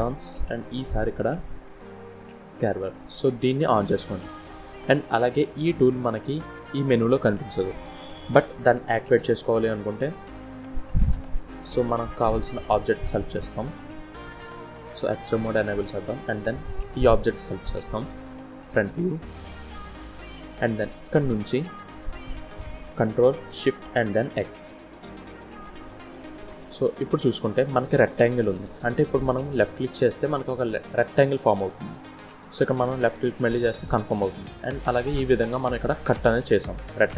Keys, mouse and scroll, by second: 7.4-7.9 scroll down 2, 10.3 click, 11.6-13.0 scroll up 2, 13.7 click, 14.6 middle click, 15.6 click, 17.2 KP_1, 18.0 scroll up 1, 18.6 scroll up 1, 19.0 shift+middle click, 23.7 ctrl+shift+x, 33.8-34.1 scroll down 1, 34.1 middle click.